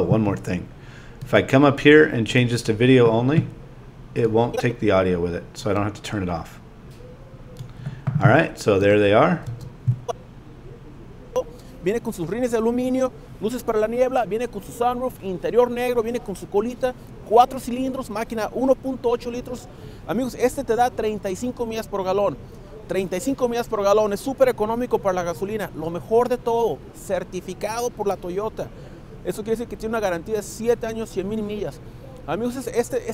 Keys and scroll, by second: 9.4 space.